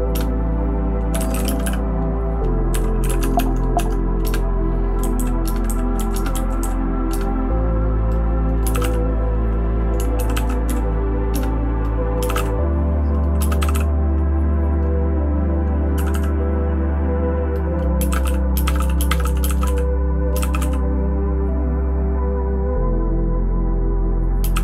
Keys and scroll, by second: 5.0 Down, 5.2 Down, 5.4 Return, 5.6 Down, 5.9 Down, 6.1 Return, 6.6 Down, 7.3 Return, 8.4-9.3 typing, 10.1 ctrl+w, 10.3 ctrl+w, 10.7 Down, 11.4 Return, 12.0-13.7 typing, 16.0 Escape, 16.1 Escape, 17.8-20.4 typing, 24.1-24.6 typing.